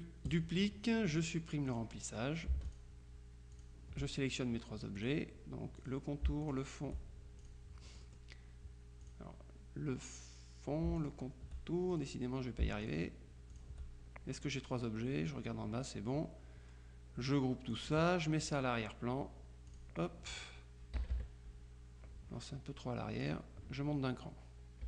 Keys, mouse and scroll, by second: 0.4 click, 1.8 click, 2.8 shift+click, 3.6 click, 5.1 click, 5.9 click, 6.5 shift+click, 7.5 shift+click, 8.1 click, 9.1 click, 11.1 shift+click, 12.0 shift+click, 12.9 shift+click, 13.6 click, 17.8 click, 19.8 click, 21.0 KP_Subtract, 23.3 click.